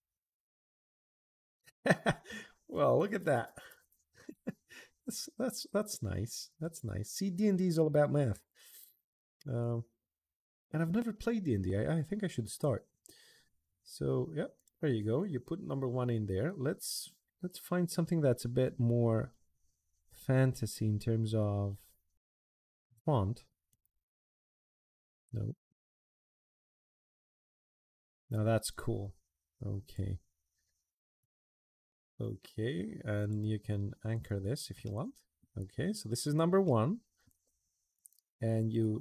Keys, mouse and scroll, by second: 5.2 click, 6.4 click, 7.6 BackSpace, 9.4 click, 14.3 click, 16.6 click, 18.4-22.1 drag, 23.5 click, 27.4 click, 29.6 click, 31.0 click, 31.7 Escape, 33.0 click, 33.9 click, 34.6 middle click, 35.5 middle click, 36.0 middle click, 36.4 middle click.